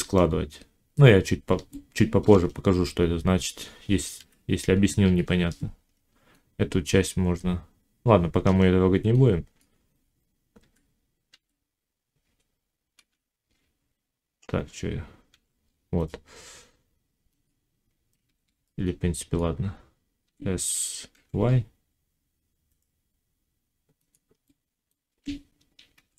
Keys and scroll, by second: 4.0 1, 10.5 g, 12.8 i, 15.2 y, 18.1 ctrl+z, 20.1 s.